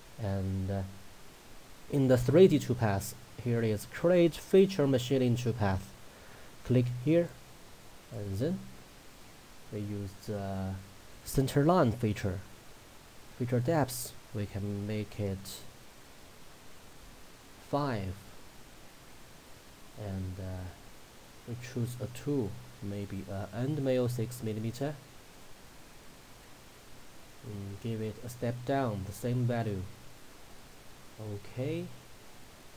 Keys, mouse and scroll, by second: 0.5-1.6 scroll down 1, 5.3-8.3 drag, 8.8-10.6 scroll up 1, 11.2-14.0 drag, 19.1-21.9 scroll down 1, 22.0 click, 26.5-26.9 scroll down 1, 27.3 click, 28.0-29.2 scroll down 1, 30.0-30.8 drag.